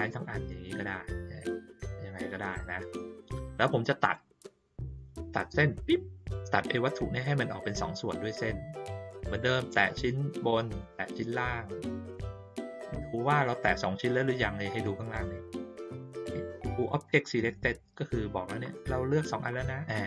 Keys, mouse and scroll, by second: 0.1-2.5 drag, 4.0 click, 6.5 click, 9.4 click, 10.7 shift+click.